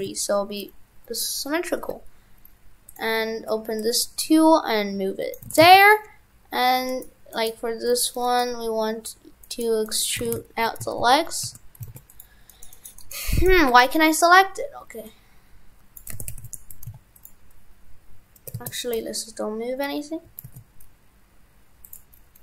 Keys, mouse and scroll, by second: 2.9 click, 5.5 shift+f, 10.3 shift+f, 13.7 click, 16.1 shift+f, 18.5 ctrl+z, 20.3 e.